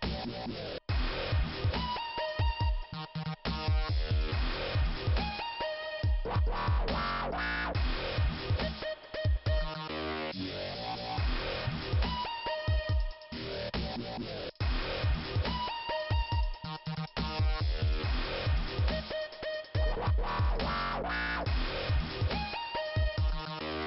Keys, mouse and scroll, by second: 2.0 click, 2.1 click, 4.3 click, 8.2 click, 8.3 click, 8.8-9.5 scroll down 1, 10.8 click, 10.8 click, 11.5 click, 11.6 click, 15.1 shift+Return, 16.0 click, 17.9 click, 19.2 scroll up 1, 20.5 click, 20.6 click, 22.0 click.